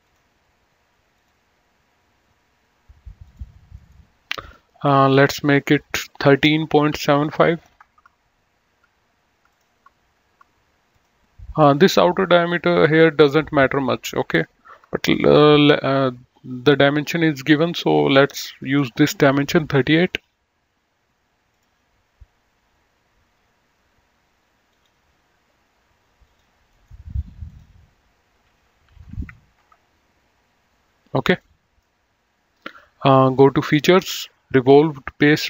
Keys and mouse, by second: 1.1 click, 3.1 click, 3.6 right click, 4.8 click, 6.6 KP_1, 6.8 KP_Decimal, 7.1 KP_7, 7.7 KP_5, 7.8 Return, 9.5 click, 10.9 click, 15.5 click, 21.5 click, 24.5 click, 26.1 click, 26.6 right click, 27.4 click, 28.9 KP_3, 29.5 Return, 31.3 middle click, 33.5 click.